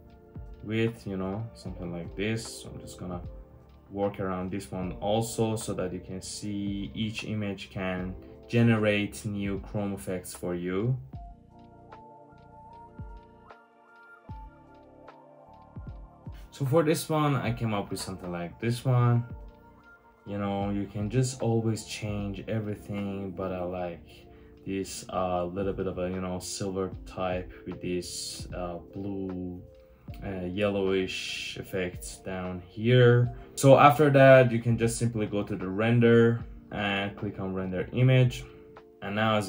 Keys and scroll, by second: 11.2 Tab, 11.3-11.6 typing, 14.6 super+z, 15.9 super+z, 16.1 Tab, 16.2 1, 16.2 Tab, 16.2 1, 22.7 typing.